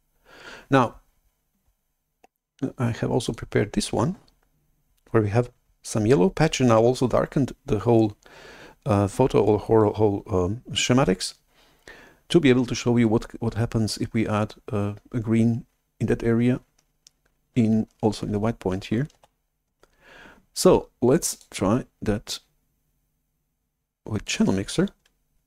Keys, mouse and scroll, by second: 3.2-5.7 drag, 19.1 shift+F11, 21.2 click, 24.2-25.4 drag.